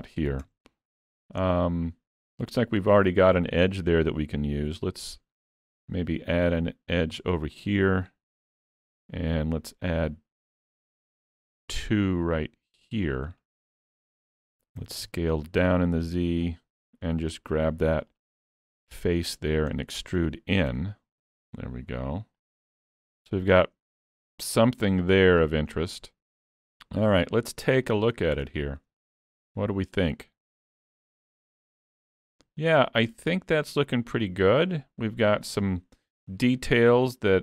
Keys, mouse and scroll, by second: 0.5 Tab, 0.8 scroll up 2, 1.1 shift+middle click, 1.5 middle click, 3.1 shift+middle click, 4.7 ctrl+r, 8.5 ctrl+r, 14.8 s, 17.6 3, 18.2 click, 19.0 middle click, 19.8 middle click, 20.8 e, 22.9 alt+a, 23.0 Tab, 23.2 scroll down 2, 23.6 middle click, 25.9 scroll down 1, 27.2 alt+a, 27.4-27.9 scroll down 4, 27.9 shift+middle click, 28.7 middle click, 30.0 click, 30.8 alt+a, 32.2 middle click.